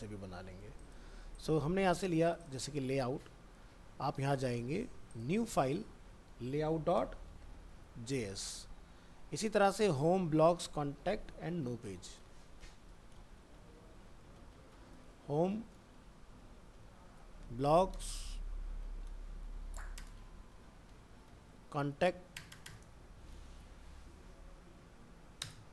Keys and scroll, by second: 2.7 ctrl+c, 3.2 alt+Tab, 5.6 ctrl+v, 9.1 alt+Tab, 12.5 alt+f, 12.6 alt+移, 15.3 alt+f, 15.4 alt+释, 18.7 alt+f, 18.8 alt+释.